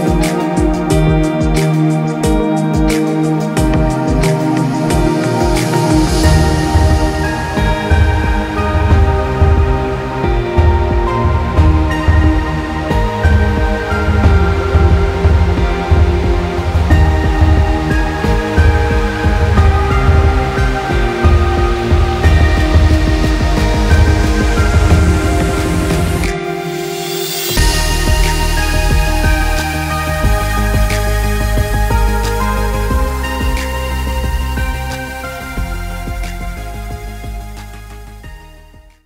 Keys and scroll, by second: 3.8 ctrl+z, 27.5 ctrl+-, 27.9 ctrl+0.